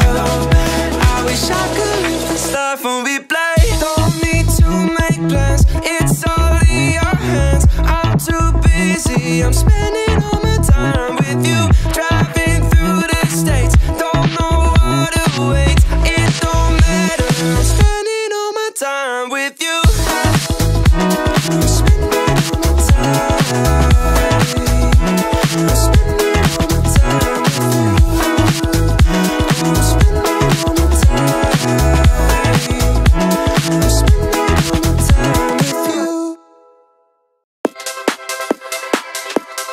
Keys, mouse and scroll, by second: 1.0 click, 2.2 click, 2.9 alt+click, 3.7 alt+shift+click, 5.0 alt+shift+click, 5.5 alt+shift+click, 7.2 click, 8.3-8.7 scroll up 2, 8.7 shift+middle click, 9.3 scroll up 1, 10.5 alt+shift+click, 12.1 alt+shift+click, 13.3 alt+shift+click, 13.9-19.5 shift+middle drag, 19.8-21.0 right drag, 22.6 click, 23.1 click, 24.2 alt+click, 25.3 alt+click, 26.1 alt+click, 27.4 alt+shift+click, 28.1 scroll down 1, 28.5 shift+middle click, 29.0 scroll up 2, 29.4 shift+middle click, 29.7 scroll up 2, 31.6 alt+shift+click, 33.2 ctrl+z, 35.3 alt+shift+click, 36.4 alt+shift+click, 37.7 x.